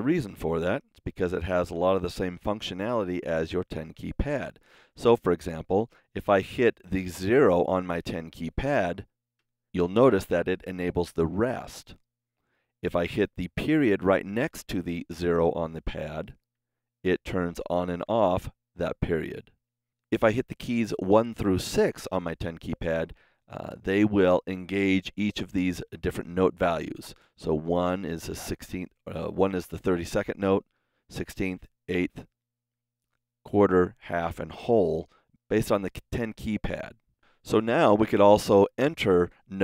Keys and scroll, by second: 16.5 KP_Decimal, 27.6 KP_1, 30.8 KP_2, 31.6 KP_3, 32.6 KP_4, 33.8 KP_5, 34.2 KP_6, 35.9-37.0 typing.